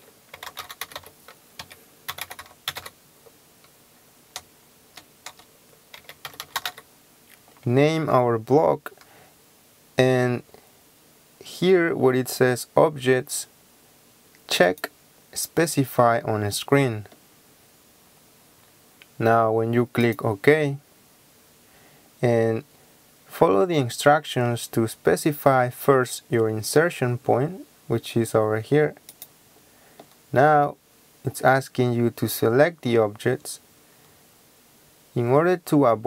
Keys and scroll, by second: 0.1-2.8 typing, 1.6 KP_Subtract, 4.4-6.7 typing.